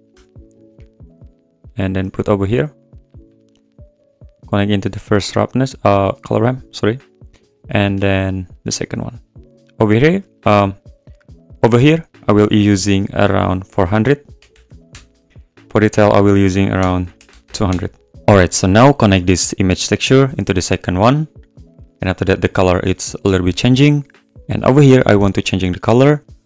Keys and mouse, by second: 2.8 click, 4.2 click, 6.2 click, 7.8 click, 9.9-10.9 drag, 13.6-14.9 drag, 14.6 0, 16.3-17.7 drag, 17.4 0, 22.5 `.